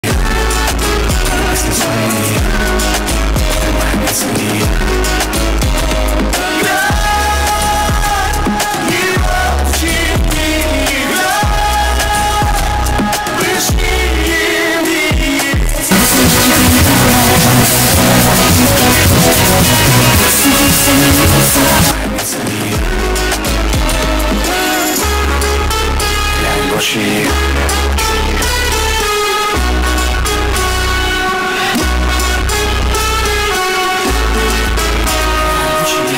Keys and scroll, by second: 2.4 s, 2.6-3.9 Down, 4.4 Down, 5.1 Down, 5.2 Down, 6.0 Down, 6.1 Return, 22.1 Page_Down.